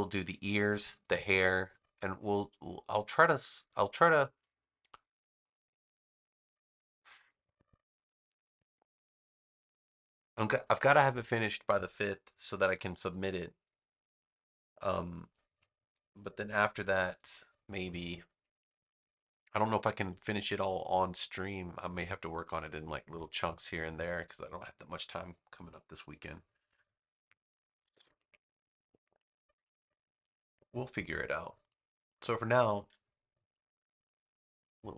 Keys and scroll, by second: 31.3 space.